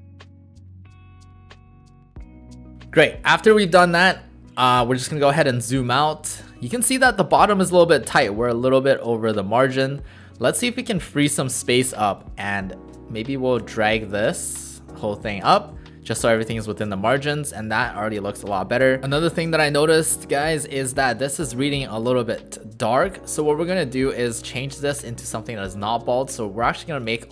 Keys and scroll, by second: 0.0-2.7 typing, 0.2 Right, 0.2 Right, 7.4 w, 11.2 w, 15.7 shift+w, 24.4 ctrl+a.